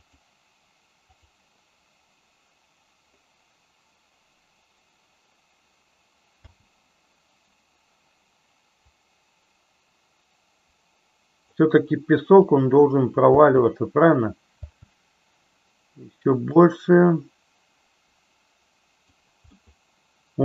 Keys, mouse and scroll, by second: 0.2 click, 1.2 click, 6.5 space, 8.8-11.5 drag, 12.6 click, 13.3 space, 14.8 space, 16.6-19.1 drag, 19.7-20.4 middle drag.